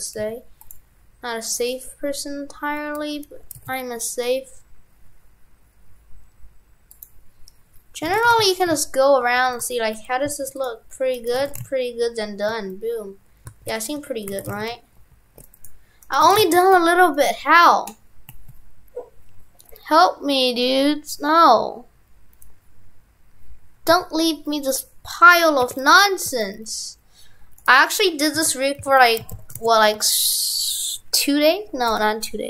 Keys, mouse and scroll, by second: 8.1 shift+f, 11.1 right click, 11.4 shift+f, 14.0 Tab, 14.4 shift+f, 16.1 right click, 16.3 shift+f, 16.8 Tab, 17.1 right click, 17.2 right click.